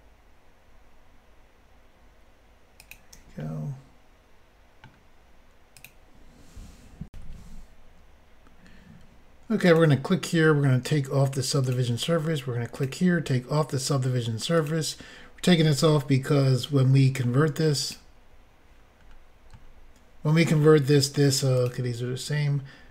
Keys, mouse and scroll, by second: 2.8 shift+click, 3.4 middle click, 5.8 click, 7.1 Insert, 9.6 click, 11.6 click, 12.7 click, 12.8 click, 14.6 click, 14.6 click, 15.9 middle click, 17.8 click, 17.9 click, 19.0 scroll down 1, 20.6 middle click, 20.6 scroll down 4, 21.6 click.